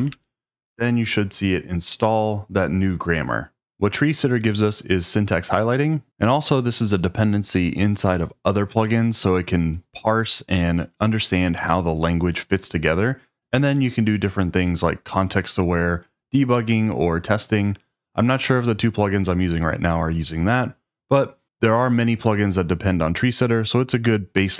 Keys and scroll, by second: 0.0-0.4 typing.